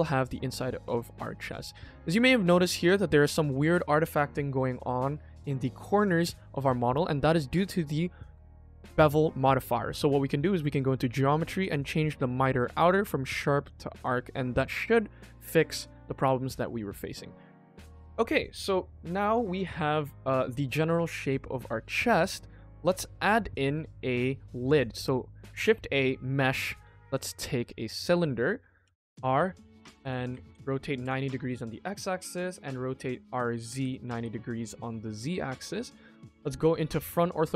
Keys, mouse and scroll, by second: 0.4 middle click, 1.3 shift+middle click, 1.7-2.6 scroll up 5, 2.1 shift+middle drag, 3.4 scroll down 1, 3.6 shift+middle click, 4.2 shift+middle click, 5.7 scroll down 2, 6.1 shift+middle click, 7.0-7.4 scroll down 1, 7.4 middle click, 10.7 click, 12.5-13.6 drag, 13.9 click, 14.3-14.7 middle drag, 15.2 middle click, 16.2 ctrl+s, 16.5-16.9 middle drag, 17.0-17.5 scroll down 3, 17.2-17.8 middle drag, 18.1-19.6 scroll up 2, 19.6 scroll up 1, 19.9 middle click, 21.6-22.9 middle drag, 23.2 scroll down 1, 23.6 shift+a, 35.5 KP_1, 36.6-37.2 shift+middle drag.